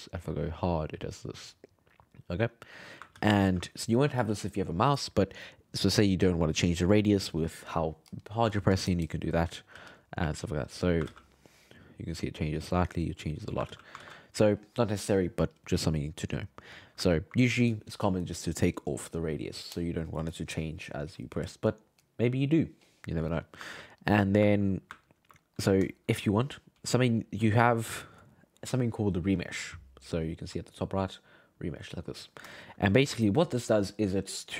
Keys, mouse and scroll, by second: 1.9-3.1 middle drag, 3.1 ctrl+z, 3.4 ctrl+z, 6.4-9.5 drag, 9.7 f, 10.2 click, 11.1 ctrl+z, 11.6-13.7 drag, 13.7 ctrl+z, 14.0 ctrl+z, 17.1-20.3 ctrl+middle drag, 24.0-26.9 ctrl+middle drag, 27.2 alt+middle click, 31.0-32.0 drag, 32.6-34.5 shift+middle drag.